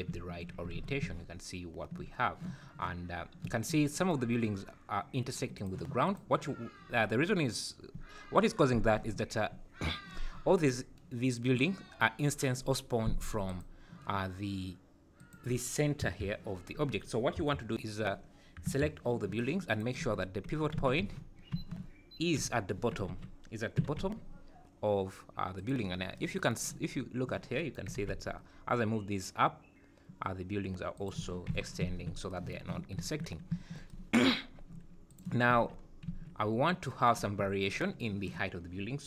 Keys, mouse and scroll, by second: 0.7 alt+a, 2.2-2.9 scroll down 1, 3.1 scroll up 3, 5.5 click, 6.0 click, 10.5 click, 13.4 click, 15.1 click, 16.0 KP_Decimal, 16.6 scroll up 1, 17.0 scroll down 3, 17.3 KP_1, 18.7 KP_3, 19.4 click, 20.0 Tab, 20.8 a, 21.0 z, 21.6 1, 22.4 h, 23.1 ctrl+z, 23.8 g, 25.9 scroll down 6, 26.9-27.2 scroll up 3, 27.9 g, 31.2 Tab, 31.5 z, 31.8 `, 32.8 scroll down 3, 33.5 `, 34.5 scroll down 2, 35.1 click, 35.5 `, 35.8 scroll up 2, 36.5 `, 38.8 scroll down 6.